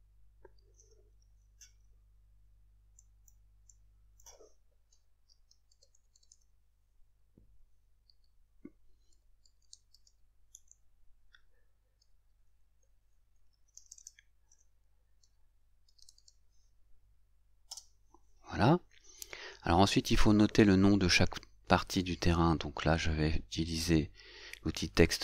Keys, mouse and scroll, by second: 3.0 click, 3.8 click, 6.0 u, 9.2 6.